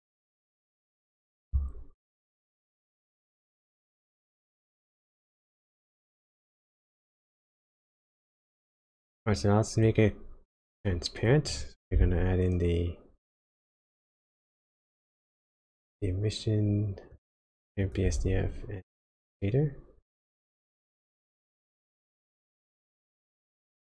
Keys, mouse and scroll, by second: 5.4 click, 6.9 middle click, 7.8-8.4 scroll down 5, 8.5 middle click, 9.3 click, 10.9 click, 11.5 click, 12.0 shift+a, 15.7 shift+a, 18.3 shift+a, 22.0 click, 23.6 click.